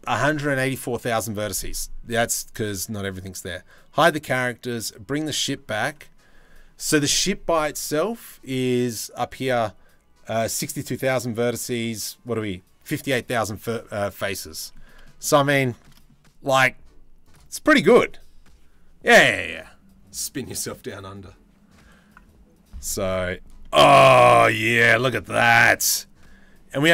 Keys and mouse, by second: 4.3 click, 14.4 click, 14.8 click, 15.3 shift+middle click, 24.5-24.8 drag.